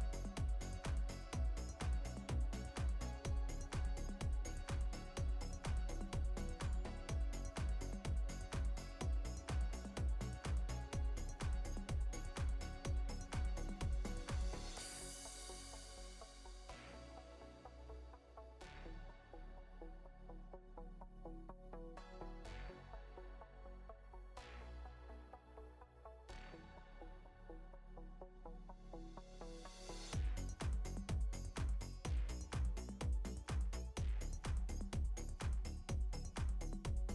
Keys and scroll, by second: 1.7 alt+Escape, 2.2 Escape, 3.7 ctrl+space, 3.9 ctrl+space, 4.7 ctrl+space, 7.8 space, 14.5 space, 16.3 space, 19.2 space, 25.4 space, 28.4 space, 32.4 space, 36.6 space.